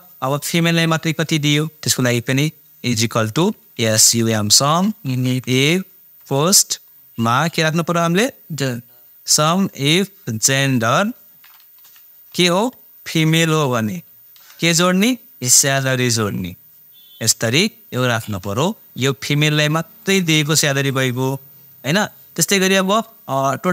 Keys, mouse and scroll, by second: 2.1 =, 3.7-6.2 typing, 10.0-11.8 drag, 11.8-14.4 typing, 15.6-17.3 drag, 17.3 shift+0, 20.0 click.